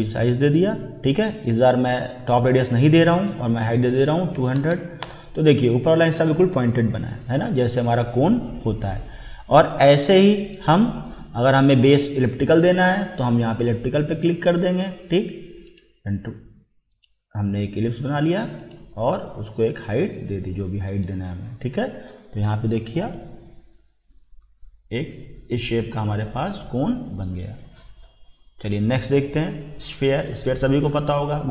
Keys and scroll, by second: 4.1-5.1 typing.